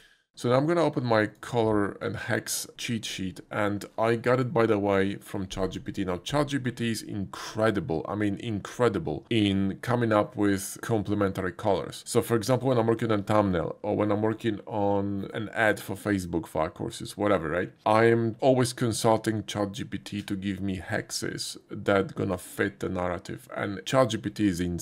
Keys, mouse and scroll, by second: 1.1 click, 2.0 click, 15.0 typing.